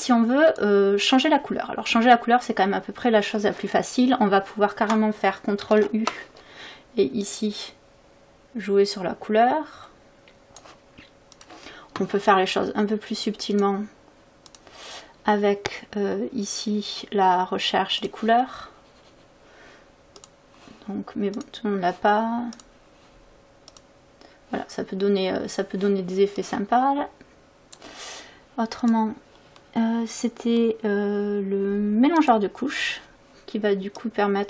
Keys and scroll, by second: 5.7 ctrl+u.